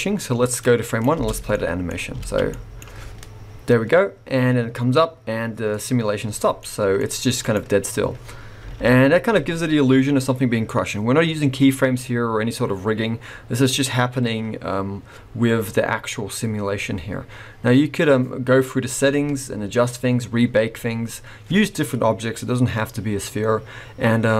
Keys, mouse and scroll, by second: 0.2 click, 1.1 space, 1.5 middle click, 2.2 alt+a, 2.5 middle click, 6.6 middle click, 7.0-8.6 scroll up 2, 7.4 click, 8.7 alt+a, 8.9-10.1 scroll down 3, 13.8-16.9 scroll up 2.